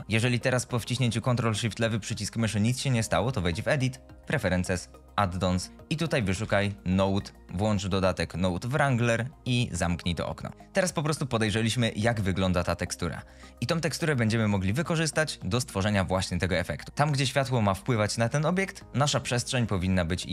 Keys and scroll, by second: 6.7 n, 6.9 o, 6.9 d.